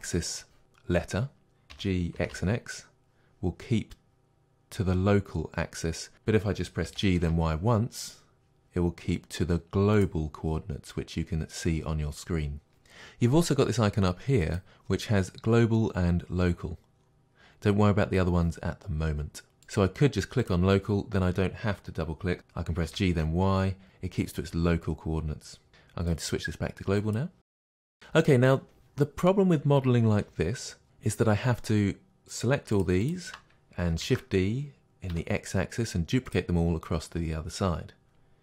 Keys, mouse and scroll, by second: 1.7 g, 6.1 right click, 6.9 g, 10.0 click, 14.4-22.4 drag, 22.4 right click, 22.9 g, 26.1-27.6 drag, 27.6-32.7 middle drag, 32.7 shift+click, 33.1-34.0 shift+drag, 34.0 shift+d, 36.3 click.